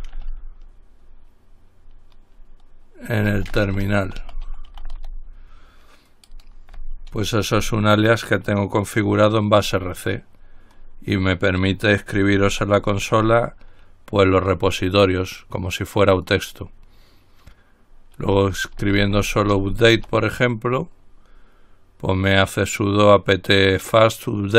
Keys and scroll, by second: 0.0-0.2 typing, 3.2-5.7 typing, 7.3 ctrl+c, 9.9 typing, 13.1 ctrl+l, 18.2-20.3 typing, 21.9 typing.